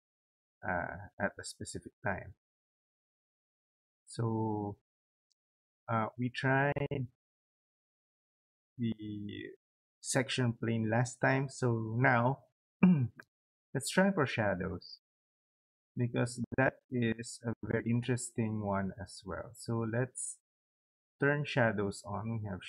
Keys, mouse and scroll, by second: 22.3 click.